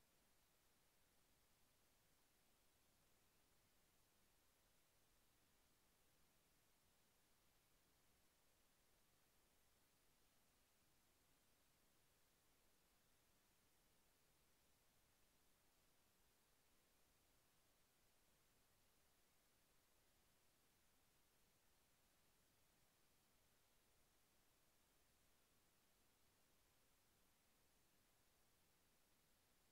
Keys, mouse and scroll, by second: 2.0 ctrl+v, 4.8 click, 7.9 click, 16.3 click, 21.8 click, 23.9 click, 25.1 click, 28.2 click.